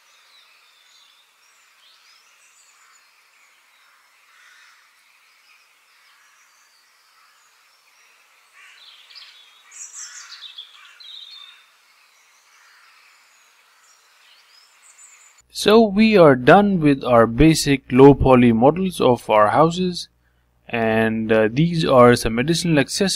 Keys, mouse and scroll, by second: 0.0 click, 2.0 click, 4.5 click, 5.2 click, 5.8 middle click, 6.2 scroll down 3, 6.5-8.4 middle drag, 8.8 click, 10.5 click, 10.9 f, 11.8 click, 12.2-13.8 middle drag, 13.8-14.4 scroll down 2, 14.4-15.6 middle drag, 19.4-21.0 middle drag, 21.0 click, 21.9 KP_Decimal, 22.4-22.8 scroll down 2, 22.8 middle click.